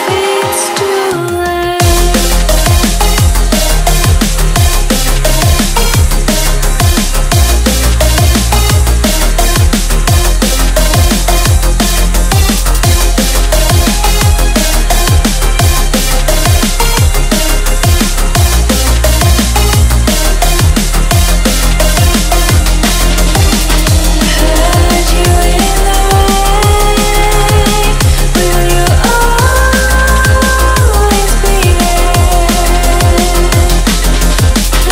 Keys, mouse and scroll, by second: 1.9 click, 3.0 click, 3.8 shift+s, 5.5 click, 8.0 click, 8.4 click, 9.2 shift+a, 10.7-12.7 drag, 12.7 Tab, 12.9-13.4 scroll down 11, 13.6 s, 14.1 s, 14.6-15.0 scroll up 9, 15.0 shift+middle click, 15.6 click, 16.7 KP_7, 17.3 click, 17.7-19.2 drag, 20.1 click, 20.6 s, 21.0 scroll up 5, 21.3 shift+middle click, 21.8 click, 21.9 s, 22.4 scroll down 1, 22.6 shift+middle click, 23.0 click, 23.6 click, 23.7 click, 24.5 click, 24.6 click, 25.4 click, 26.5 s, 27.0-27.4 scroll up 3, 27.4 click, 28.0 click, 28.1 click, 29.4 e, 30.0 r, 31.2 click, 31.5 s, 32.1 click, 32.2 click, 33.1 e, 34.1 r.